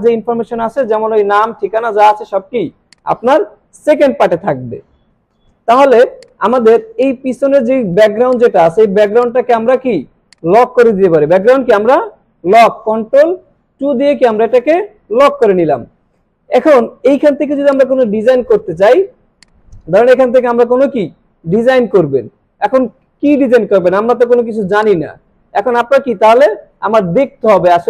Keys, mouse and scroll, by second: 2.9 click, 5.8 alt+scroll up 1, 6.1 space, 6.2-6.8 drag, 13.3 ctrl+2, 15.2 space, 15.3 click, 15.7-16.3 space, 17.7-18.9 drag, 24.6 space, 24.8 click, 25.1-25.4 space, 26.1 space, 26.4 click, 26.6-27.0 space.